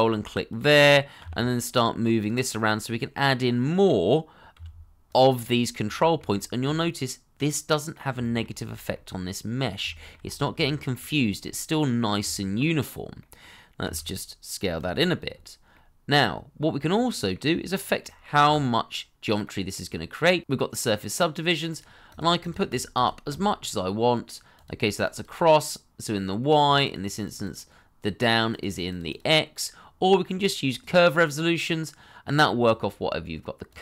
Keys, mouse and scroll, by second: 1.2 g, 2.5 middle click, 4.5 s, 5.4 middle click, 6.3 shift+middle click, 7.3 middle click, 8.6 scroll down 1, 8.9 middle click, 9.9 shift+middle click, 10.2-10.6 scroll up 1, 10.6 shift+middle click, 11.1 scroll down 1, 11.4 middle click, 12.3 shift+middle click, 13.2 middle click, 13.8 s, 15.7 middle click, 25.9 double click, 26.8 double click, 31.0 middle click.